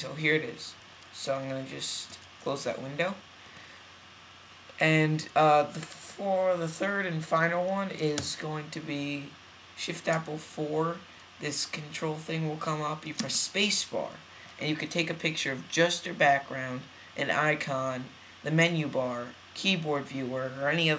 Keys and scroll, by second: 2.0 super+w.